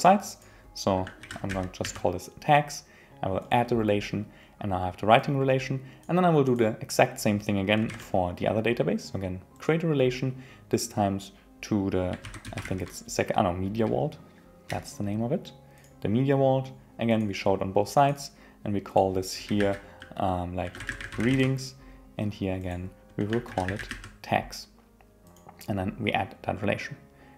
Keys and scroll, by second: 19.6 super+a.